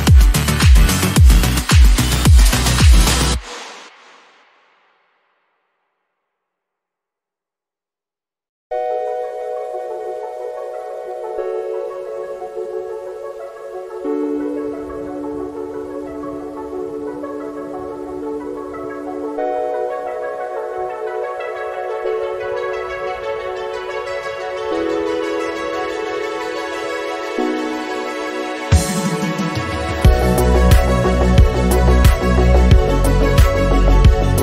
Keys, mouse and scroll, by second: 0.3 middle click, 1.1 KP_1, 2.9-4.7 drag, 4.7 g, 9.6-10.7 drag, 10.7-11.1 scroll down 3, 12.6-13.2 scroll up 4, 13.2 scroll down 2, 13.2 scroll up 1, 13.4-14.2 scroll down 3, 14.2-16.2 drag, 16.2 scroll up 4, 16.7-17.1 scroll up 3, 17.1 click, 17.2-17.8 scroll down 4, 17.8-25.5 drag, 25.6-26.0 scroll up 5, 26.3 click, 26.5-27.0 scroll down 7, 27.0-31.1 drag, 31.1 KP_7, 33.3-34.4 drag.